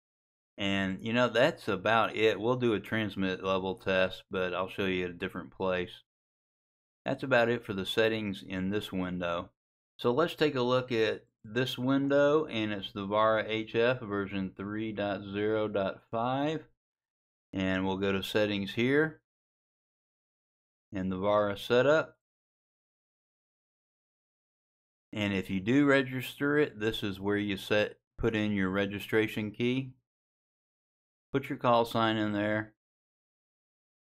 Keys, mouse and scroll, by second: 23.7 click.